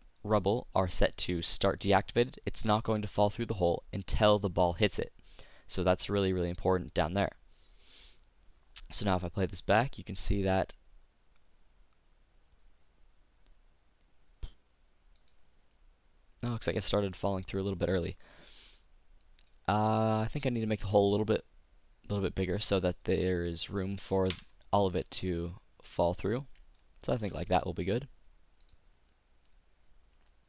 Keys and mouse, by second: 1.1 click, 7.0 middle click, 9.0-10.8 drag, 10.8-12.2 middle drag, 15.4-16.5 middle drag, 20.9 click, 21.9 middle click, 24.4 Tab, 25.3 s, 26.4 click, 27.0 click, 27.2 Tab, 28.9 click, 30.3-30.4 middle drag.